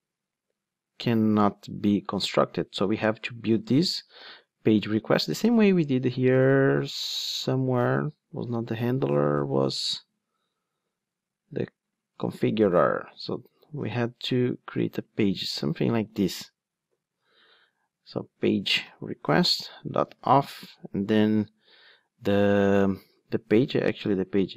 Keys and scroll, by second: 17.2 ctrl+Tab, 19.4 Return.